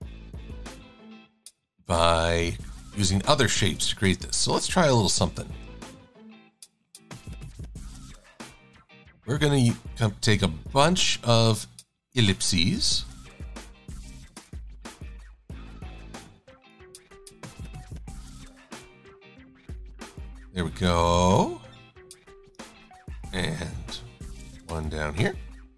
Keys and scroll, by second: 5.9 a, 24.7 e.